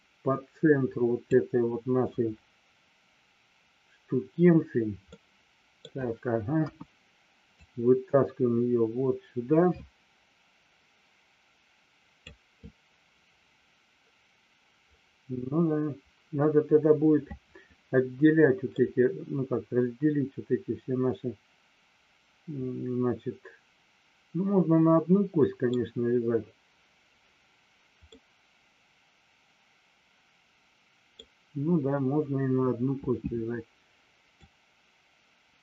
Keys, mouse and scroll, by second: 4.9 scroll up 1, 5.2 middle click, 6.6 KP_1, 7.7-12.2 drag, 18.7 scroll up 1, 18.8-25.7 middle drag, 28.2-31.1 middle drag, 31.1 scroll down 1, 32.8 KP_1, 34.3-35.6 drag.